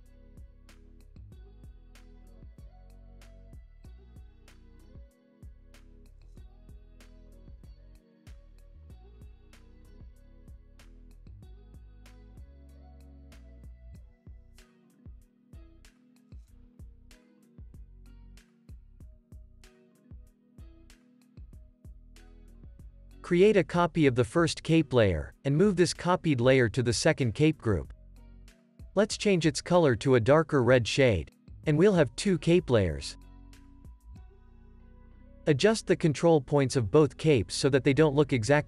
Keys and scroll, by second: 1.5 Tab, 3.0 Tab, 10.1 space, 11.7 space, 15.3 space, 19.9 space, 20.4 super+s, 24.4 super+s, 26.5 super+c, 28.1 super+v, 28.7 super+s, 32.0 super+s, 32.8 Delete, 33.7 super+s, 37.8 Tab.